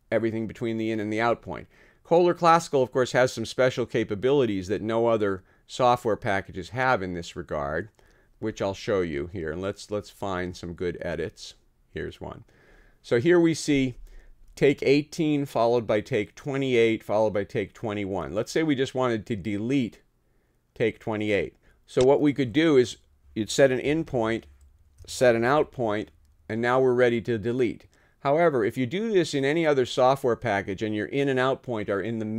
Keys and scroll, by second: 23.9 [, 25.6 ].